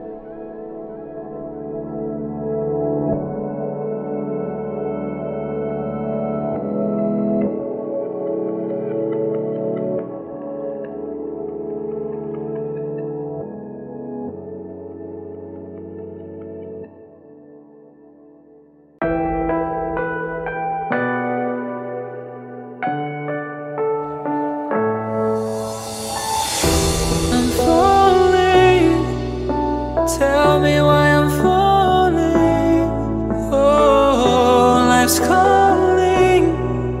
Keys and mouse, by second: 4.2-6.2 shift+middle drag, 6.2-13.9 drag, 16.0-17.4 drag, 17.4 g, 26.6-28.9 drag, 28.9 g, 35.0-37.0 drag.